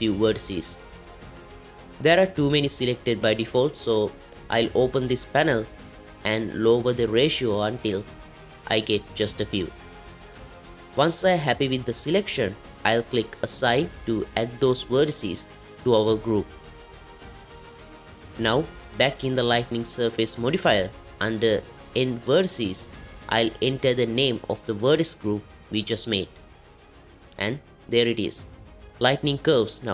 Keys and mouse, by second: 1.2 shift+click, 6.4-9.8 drag, 14.9 click, 17.5 Tab, 21.1 click, 23.2-26.1 drag, 27.1 middle click, 29.1 z.